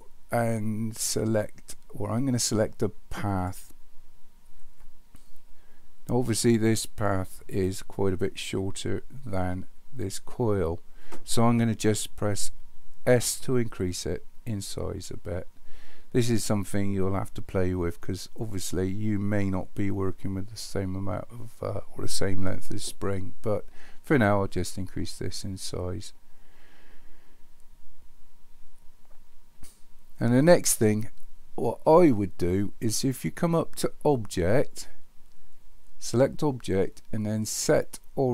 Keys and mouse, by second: 13.1 s, 34.2-38.3 drag.